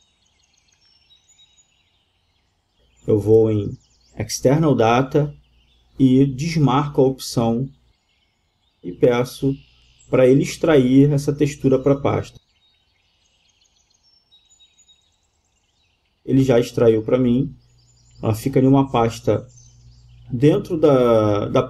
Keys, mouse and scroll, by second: 11.5-13.6 drag.